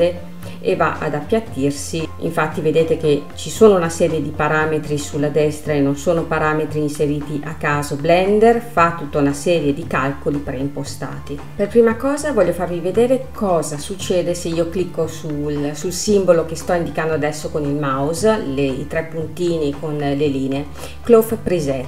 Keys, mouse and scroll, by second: 1.3 click, 2.0-2.5 scroll up 2, 4.5-7.6 drag, 8.3 click, 20.8-21.8 drag.